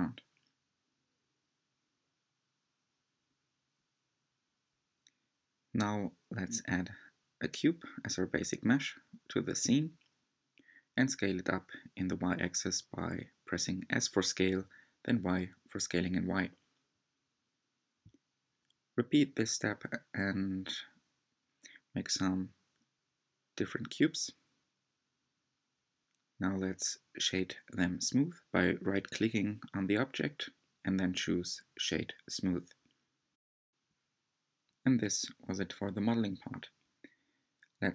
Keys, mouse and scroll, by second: 0.3 scroll down 2, 1.7 click, 2.1-2.6 scroll down 3, 2.7 middle click, 3.4-3.9 scroll down 2, 6.6 shift+a, 7.2-7.9 middle drag, 7.9-8.2 scroll up 2, 8.5 shift+middle click, 9.1 s, 12.9-14.1 middle drag, 14.1 shift+d, 15.4 s, 15.9-16.6 shift+middle drag, 16.6 shift+d, 18.0 s, 18.5 shift+middle drag, 18.7 shift+d, 19.7-20.3 middle drag, 20.3 s, 22.1-22.5 middle drag, 22.5-22.9 scroll down 2, 22.9 click, 23.1 shift+d, 23.8-24.3 middle drag, 24.3 s, 25.3 middle click, 26.1 scroll down 1, 27.5 click, 27.6-28.1 shift+middle drag, 28.1-29.1 scroll up 5, 29.1-29.5 scroll up 1, 29.5 click, 29.7-31.0 right drag, 31.0 click, 31.2 right click, 31.6-32.0 scroll down 2, 32.0 click, 32.4 right click, 33.0 click, 33.3-34.0 right drag, 34.0 click, 34.2 right click, 35.2 click.